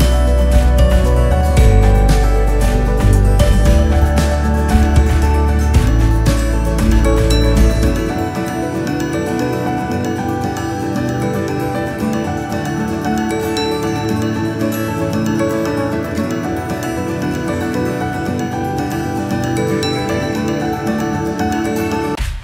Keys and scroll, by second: 1.0 typing, 5.6 Return, 6.5-7.3 typing, 9.8-10.8 typing, 14.0 Return.